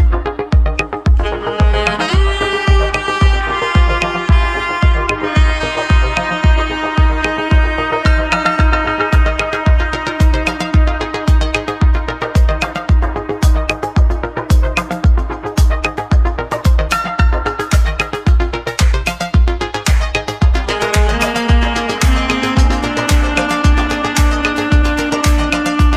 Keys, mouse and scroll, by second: 2.9 ctrl+r, 7.8 Tab, 8.2-9.1 scroll down 2, 9.5-12.0 middle drag, 14.2 g, 17.0-17.7 scroll down 1, 18.2-18.9 scroll down 5, 18.9-21.4 shift+middle drag, 25.3-25.9 drag.